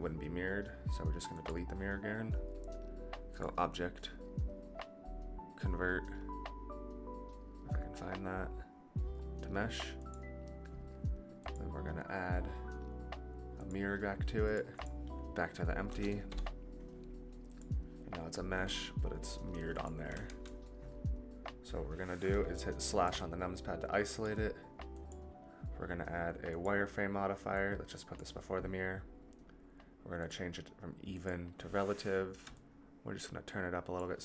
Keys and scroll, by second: 18.6 g, 20.2 ctrl+z, 23.0 KP_Divide.